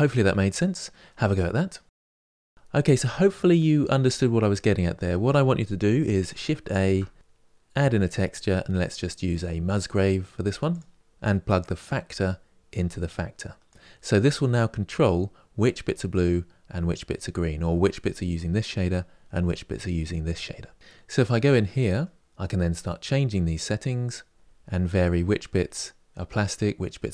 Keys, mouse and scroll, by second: 13.4-24.3 drag, 24.5-26.8 middle drag.